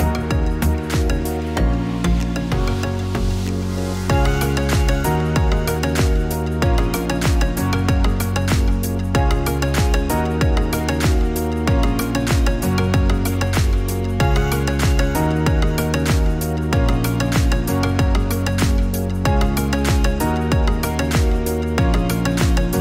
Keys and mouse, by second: 0.2-9.0 drag, 11.8-12.9 drag, 21.1 click.